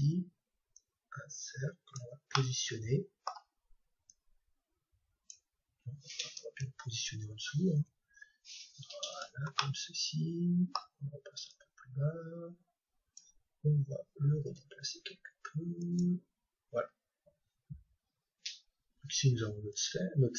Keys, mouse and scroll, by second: 2.4-4.4 middle drag, 4.0-6.0 drag, 7.8 g, 9.2-11.1 drag, 9.6-11.4 middle drag, 11.4-13.4 drag, 14.5 g, 15.9-17.8 drag, 19.7-20.3 drag.